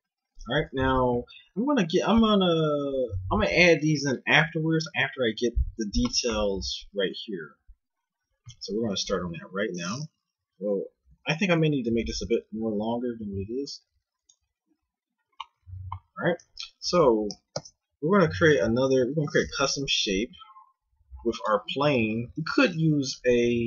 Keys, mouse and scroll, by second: 9.1 KP_1, 11.1 a, 11.4 s, 14.6 a, 16.4 a, 16.8 Tab, 17.6 shift+a, 18.9 KP_1, 19.6 z, 20.3 F6, 22.5 g.